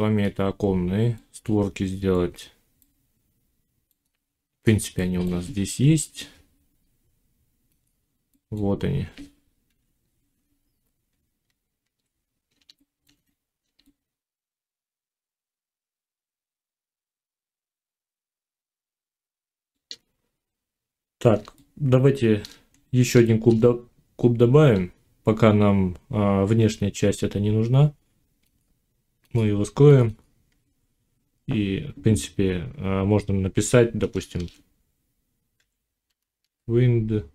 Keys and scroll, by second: 9.5 1, 11.3 z, 34.1 shift+w, 35.4 i.